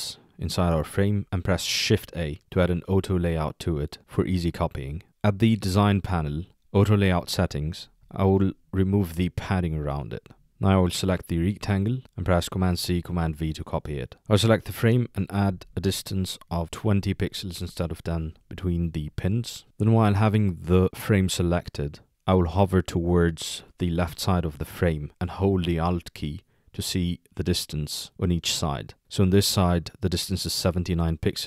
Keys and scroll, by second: 1.8 shift+a, 12.6 super+c, 13.4 super+v.